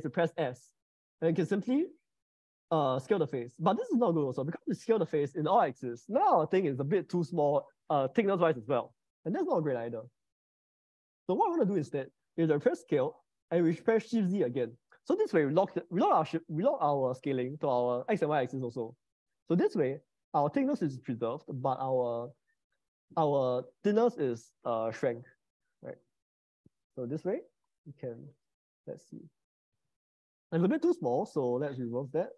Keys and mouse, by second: 0.4 s, 6.6-9.0 middle drag, 10.4 middle click, 11.4 ctrl+z, 12.7 s, 14.5 shift+z, 26.8 middle click, 28.4 click, 29.1 click, 31.6 ctrl+z.